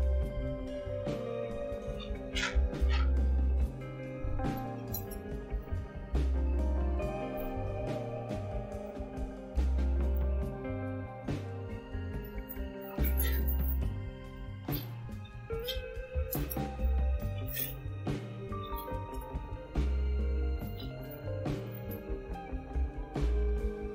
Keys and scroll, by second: 2.9-3.2 typing, 3.2 Return, 4.2-6.1 typing, 7.8-9.1 typing, 12.5-19.1 typing.